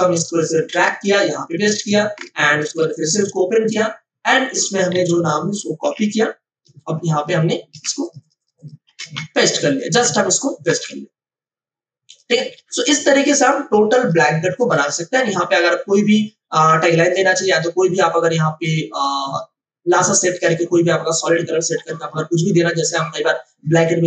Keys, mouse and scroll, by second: 2.6 ctrl+o, 4.5 click, 4.9 F2, 5.8 ctrl+c, 6.6 Escape, 7.8 space, 8.0 ctrl+click, 9.1 t, 9.6 click, 10.0 ctrl+a, 12.0 click, 12.4 ctrl+space, 12.8 ctrl+alt+click, 14.7-16.6 drag, 16.6 space, 16.8-24.0 ctrl+drag.